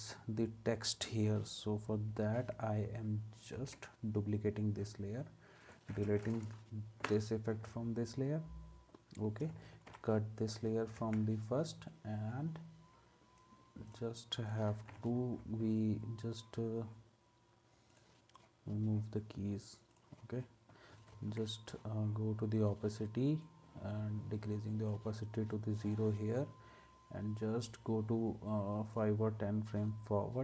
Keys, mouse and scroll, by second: 3.5 ctrl+d, 7.0 Delete, 9.9 alt+[, 11.0 ctrl+s, 21.1 ctrl+s.